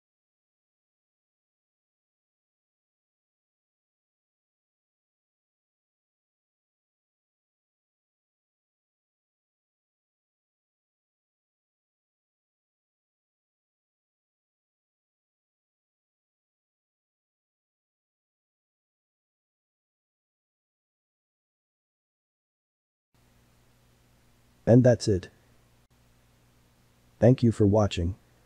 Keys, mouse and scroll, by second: 1.4-4.1 middle drag, 4.1 g, 5.2 Tab, 5.6-8.4 middle drag, 8.4 Tab, 8.7 middle click, 9.4 alt+z, 9.8-11.4 middle drag, 11.4 click, 12.8 shift+click, 14.1-15.2 middle drag, 15.2 shift+click, 15.6 middle click, 16.9 s, 19.6 Tab, 20.0-27.6 ctrl+middle drag.